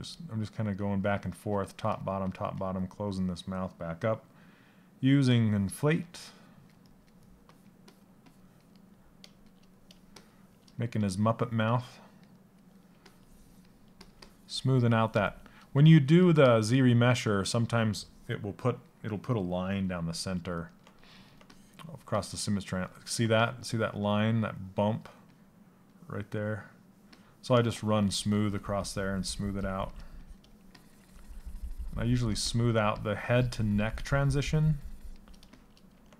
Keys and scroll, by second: 4.9 Down.